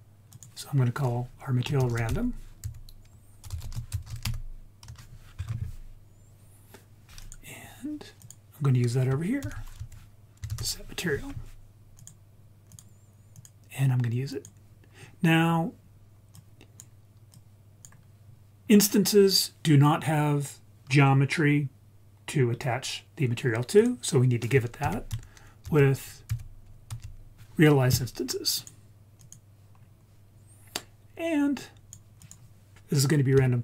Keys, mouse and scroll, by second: 0.3 click, 7.2-8.2 drag, 9.4 shift+a, 13.4-14.5 drag, 15.4 scroll down 2, 16.4-16.8 drag, 17.3 click, 18.6 scroll up 2, 23.8 click, 24.8 shift+a, 29.8-30.6 scroll down 2, 30.6-31.6 scroll up 1, 31.6-32.0 drag, 32.2 click, 32.7 shift+a.